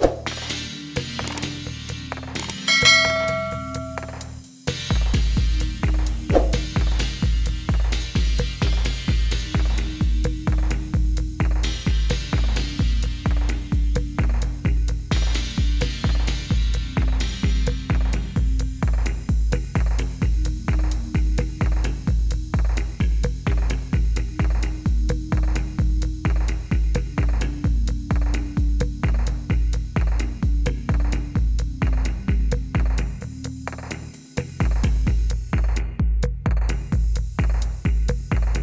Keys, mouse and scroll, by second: 0.4 Delete, 3.1 middle click, 3.2-4.3 scroll, 5.3 click, 5.3-6.8 scroll, 6.8 click, 7.6 click, 12.4 click, 14.4 click, 15.5-16.0 scroll, 19.5 click, 20.5 click, 21.0 typing, 21.2 Return, 24.3 click, 24.7 click, 24.9 click, 26.0 click, 26.7-27.3 scroll, 27.3 click, 28.2 click, 28.7 Delete, 29.0 click, 30.1 click, 31.1 click, 31.8 click, 33.8 click, 34.4 click, 37.0 click, 37.1 middle click, 38.1 middle click, 38.1 click, 38.1 middle click.